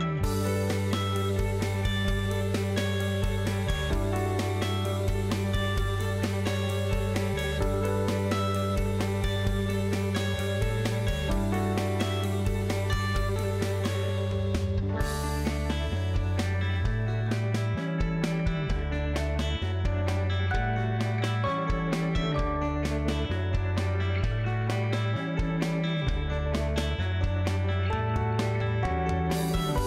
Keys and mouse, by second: 0.2 shift+middle click, 1.7 g, 2.8 ctrl+click, 3.4 g, 5.5 ctrl+click, 6.4 g, 8.7 KP_Decimal, 11.1 ctrl+click, 12.2 g, 16.4 click, 17.2 g, 18.6 g, 20.5 ctrl+z, 24.4 a, 25.1 KP_7, 26.4 g, 27.9 Tab.